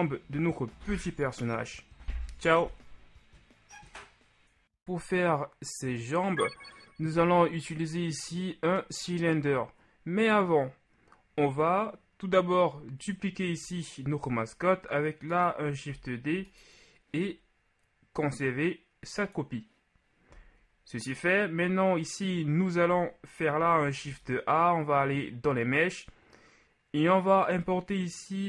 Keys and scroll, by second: 15.9 shift+d, 24.1 shift+a.